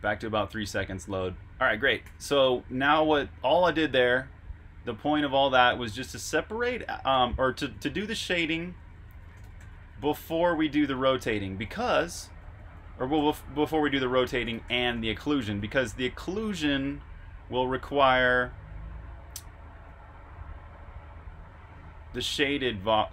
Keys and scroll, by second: 2.0-3.6 typing, 6.1-8.2 typing, 18.0-19.8 typing, 22.1-22.9 typing.